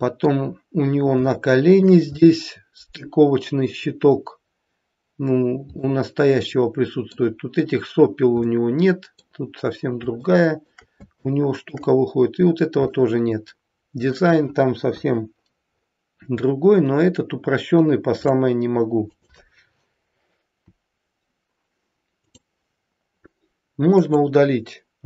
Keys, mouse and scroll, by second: 1.2 shift+middle click, 2.3 middle click, 5.8 middle click, 8.3 middle click, 10.2 shift+middle click, 10.5 shift+middle click, 12.8 middle click, 14.9 KP_1, 15.8-16.2 scroll up 2, 17.2-17.6 scroll down 2, 18.2 click, 19.0 click, 22.3 click, 23.9 click.